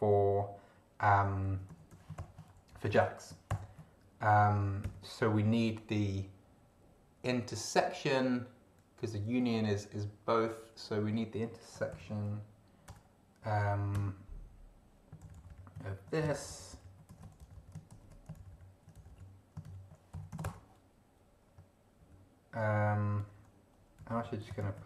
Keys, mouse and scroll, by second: 1.3-2.6 typing, 2.7 shift+End, 2.9 shift+Left, 4.8 ., 11.5-12.8 typing, 13.9 Return, 15.2 ctrl+Left, 16.2 ctrl+shift+Left, 17.1 ctrl+shift+c, 17.2 ctrl+shift+End, 17.4 ctrl+shift+Left, 17.9 ctrl+shift+v, 18.4 ctrl+shift+Left, 19.6 ctrl+shift+Right, 20.1 ctrl+shift+j, 20.3 ctrl+shift+x, 20.4 ctrl+shift+space, 20.5 ctrl+shift+BackSpace, 22.0 ctrl+Left, 23.2 Up, 24.0 Down, 24.4 Home, 24.6 ctrl+shift+Right, 24.8 ctrl+shift+c.